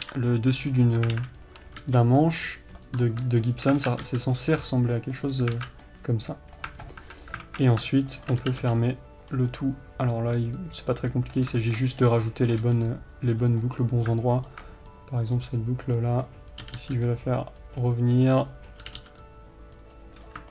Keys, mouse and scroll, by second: 0.4 KP_7, 1.1 scroll up 1, 1.5 alt+a, 2.5 b, 4.2 alt+z, 5.6 scroll down 2, 5.9 alt+z, 6.2-6.8 scroll down 2, 7.1 Tab, 7.5 scroll up 2, 7.8 alt+a, 8.1 click, 8.6 shift+click, 8.8 f, 9.7 scroll down 2, 9.9-12.9 middle drag, 12.2-12.9 scroll up 1, 12.9 click, 13.0 g, 14.0-14.8 middle drag, 14.8 alt+click, 15.0-19.2 middle drag, 17.0 g.